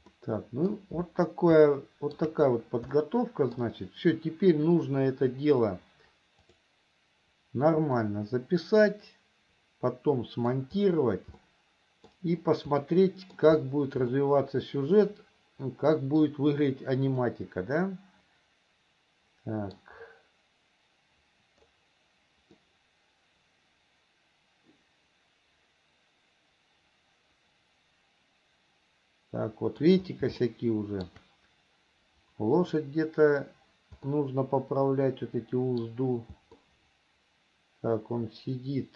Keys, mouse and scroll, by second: 0.4 middle click, 2.0 shift+middle click, 3.2 middle click, 7.3 click, 8.3-10.9 middle drag, 11.8 middle click, 13.2 middle click, 14.5-16.6 middle drag, 17.5-20.2 middle drag, 23.0-30.2 middle drag, 30.8 shift+middle click, 34.5-36.2 middle drag, 37.0-38.9 middle drag.